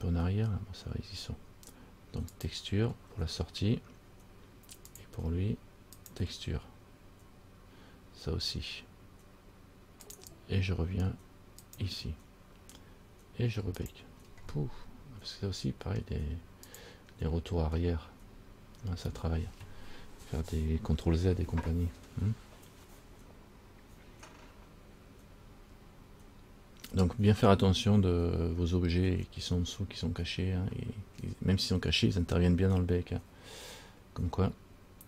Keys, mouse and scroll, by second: 2.6 click, 5.1 click, 6.2 click, 10.2 click, 14.0 click, 14.9 scroll down 2, 16.9 click.